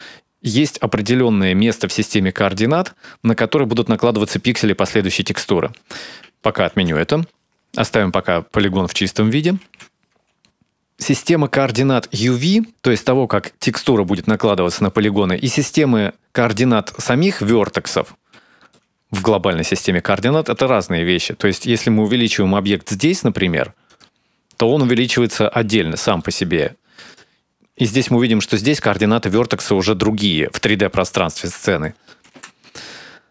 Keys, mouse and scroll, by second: 7.4 ctrl+z, 9.7 right click, 17.9 click, 19.3 shift+middle click, 20.0-21.4 scroll down 2, 21.4 a, 22.5 s, 27.2 shift+middle click, 28.0 right click, 30.8 middle click, 31.7 KP_7, 32.3 scroll down 2, 32.5-33.3 scroll up 1.